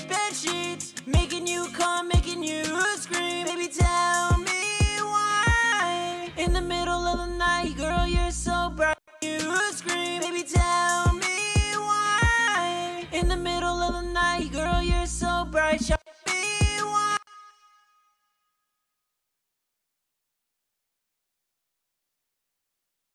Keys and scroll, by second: 1.8 F4, 10.6 alt+shift+d, 16.5 space, 20.0 super+4, 20.2 super+4, 21.4 super+7.